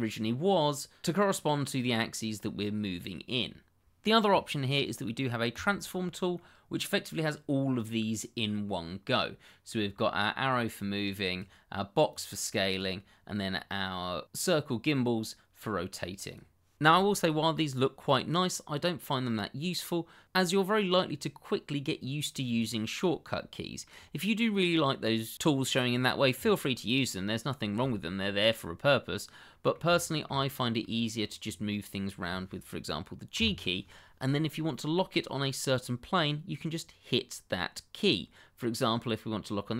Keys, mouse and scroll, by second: 5.5 click, 6.3 middle click, 10.7 click, 14.4 click, 17.2 middle click, 18.5 shift+middle click, 19.0 middle click, 22.4 click, 23.0 middle click, 26.9-27.2 scroll down 1, 27.2 middle click, 30.0 shift+middle click, 30.5 scroll down 1, 30.8 middle click, 33.3 g.